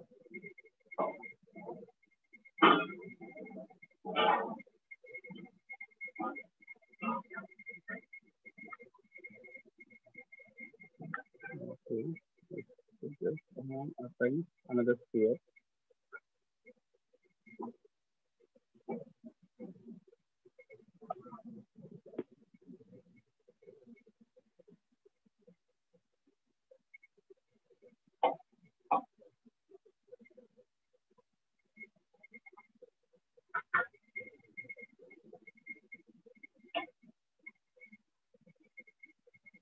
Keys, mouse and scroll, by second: 1.7 click, 1.7-2.7 scroll, 2.7 click, 2.7-3.1 scroll, 3.7-4.7 ctrl+scroll, 4.7-5.6 ctrl+scroll, 6.7 ctrl+scroll, 7.7-8.2 ctrl+scroll, 8.7-9.7 ctrl+scroll, 10.7 ctrl+scroll, 11.7 click, 12.7 shift+click, 13.7 alt+click, 14.7 click, 15.7 click, 16.7 click, 17.7 w, 19.7 click, 21.7 shift+click, 21.7 x, 24.7 shift+click, 26.7 click, 28.7 click, 31.7 alt+click, 32.4-33.2 typing, 36.7 click.